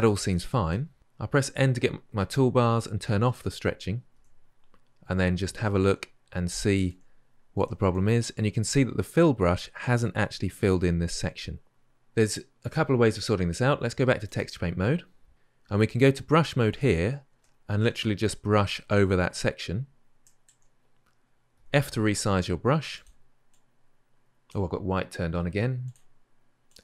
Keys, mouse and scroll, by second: 1.2 n, 14.1 click, 16.6-22.7 drag, 22.7 f, 23.3-25.7 drag, 26.5-26.8 drag.